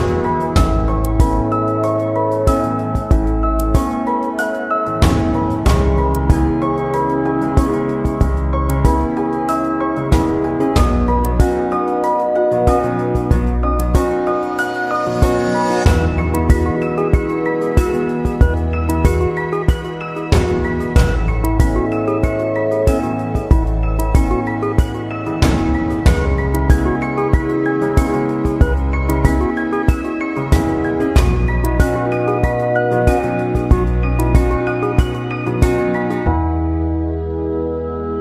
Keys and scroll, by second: 7.6 Right, 9.0 Down, 9.2 Right, 9.4 Down, 9.5 Right, 9.8 Down, 9.9 Right, 10.0 Down, 10.0 Right, 10.3 Down, 10.4 Right, 12.1 ctrl+[.